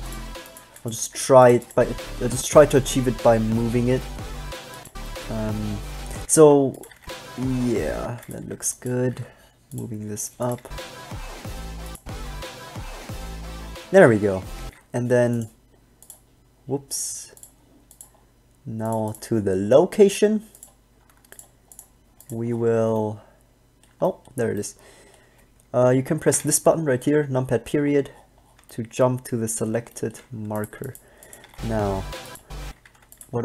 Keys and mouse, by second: 1.0 b, 1.2 g, 6.4 alt+a, 7.1 alt+a, 8.1 alt+a, 8.6 b, 9.2 g, 10.8 alt+a, 14.8 alt+a, 26.5 KP_Decimal, 28.0 middle click, 31.6 alt+a, 32.8 alt+a.